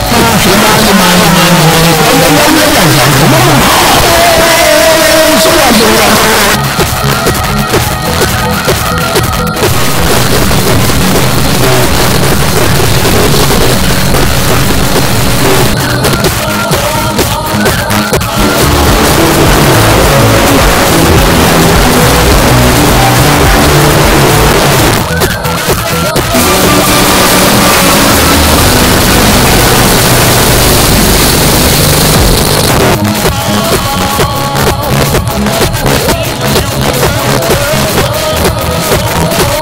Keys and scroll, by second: 6.1 Page_Down, 15.7 Page_Down, 24.5 Page_Down, 32.4 Page_Down.